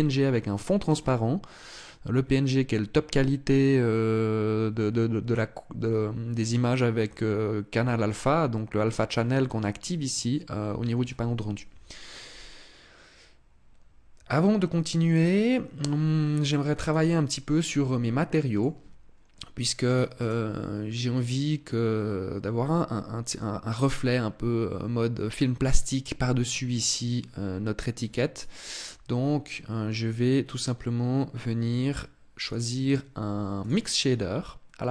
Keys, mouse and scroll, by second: 16.5 right click, 18.2 click, 19.5 right click, 19.9 right click, 28.0 right click, 32.1 click.